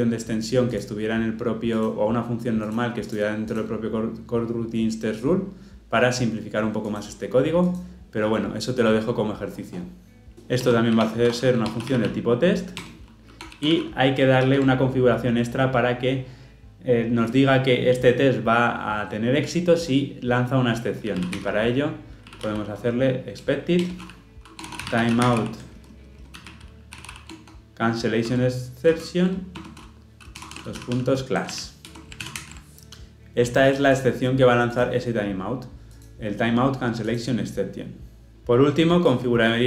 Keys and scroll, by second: 12.8 Return, 14.4 ctrl+p, 23.8 Return, 29.6 Return, 32.3 ctrl+alt+o.